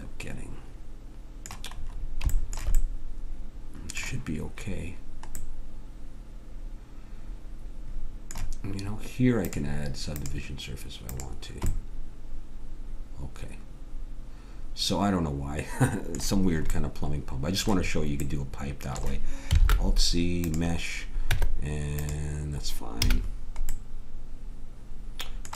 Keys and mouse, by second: 0.5 click, 1.8-3.0 middle drag, 3.2 middle click, 3.8-5.6 middle drag, 7.2 middle click, 9.4-12.1 drag, 13.9-16.7 middle drag, 19.6 alt+c, 21.3 Tab, 23.1 a.